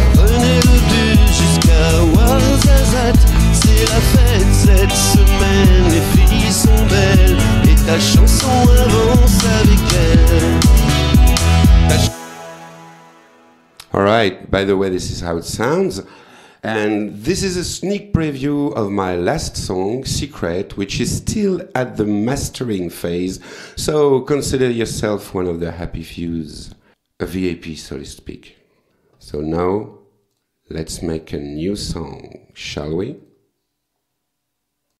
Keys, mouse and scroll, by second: 3.6 scroll up 1, 12.1 space, 12.9 click, 30.3 click, 31.3 click, 33.2 click, 34.9 click.